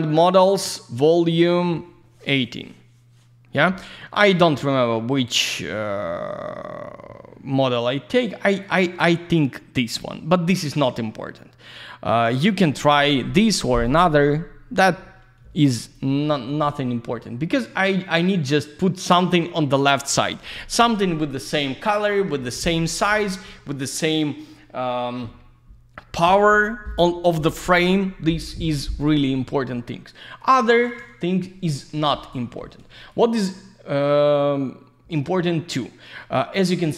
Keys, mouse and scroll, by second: 3.8-4.3 scroll down 1, 8.0 scroll up 1, 8.6 click, 9.7 click, 10.3-10.7 scroll down 1, 15.8 click, 29.8 alt+middle click, 30.5 alt+z, 30.6 click, 31.0 alt+middle click, 31.9 alt+z, 32.0 click, 32.4 F4, 33.1 click, 33.5 alt+middle click, 35.4 middle click, 36.3 alt+middle click.